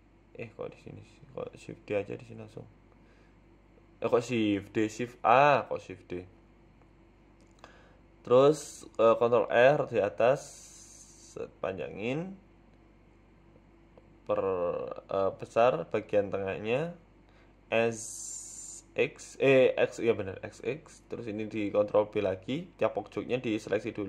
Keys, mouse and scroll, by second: 0.2 ctrl+r, 1.1 KP_1, 1.7 shift+a, 2.9 s, 3.9 g, 5.6 middle click, 6.3 g, 7.5 KP_1, 8.0-8.4 scroll up 2, 8.4 shift+middle click, 8.9 ctrl+r, 10.4 scroll up 3, 10.7 shift+middle click, 11.9 click, 12.4 s, 14.1 scroll down 2, 14.5 click, 14.9 s, 17.0 l, 17.5 a, 18.4 ctrl+z, 18.6 s, 20.6 click, 21.1 shift+click, 22.8 ctrl+b.